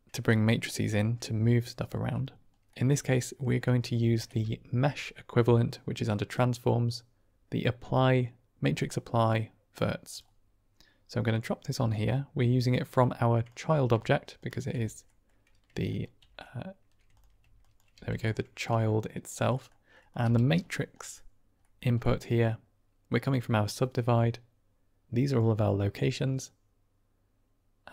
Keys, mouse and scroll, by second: 2.7 click, 3.9 shift+a, 11.9-13.4 drag, 14.3 ctrl+shift+click, 15.0 middle click, 15.8 ctrl+click, 17.5 drag, 17.8 g, 18.5 drag, 19.5 click, 20.2 g, 20.9 middle click, 21.6 middle click, 22.0 middle click, 23.0-27.9 drag.